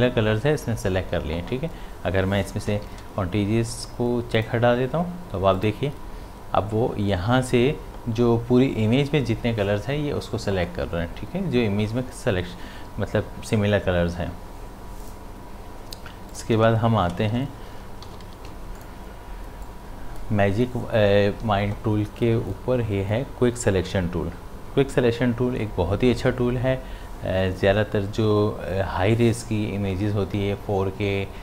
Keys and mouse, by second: 2.7 click, 2.8 d, 4.4 click, 15.0 click, 17.1 v, 18.1 ctrl+d, 18.2 v, 18.8-22.4 drag.